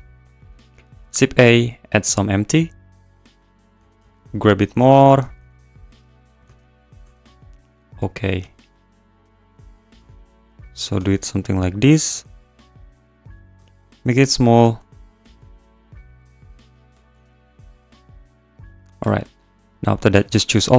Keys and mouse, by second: 0.0 click, 0.8 click, 0.9 shift+a, 3.7 shift+a, 3.7 s, 4.0 z, 5.0 click, 5.1 g, 5.3 z, 5.9 click, 6.4 s, 6.9 click, 7.0 s, 7.2 z, 8.0 click, 8.4 s, 9.4 click, 10.0 g, 10.1 z, 10.7 click, 10.8 s, 10.9 z, 11.5 click, 12.1 g, 12.2 z, 13.3 click, 13.5 s, 14.6-17.9 typing, 16.0 click, 16.7 click, 18.8 click, 19.2 `.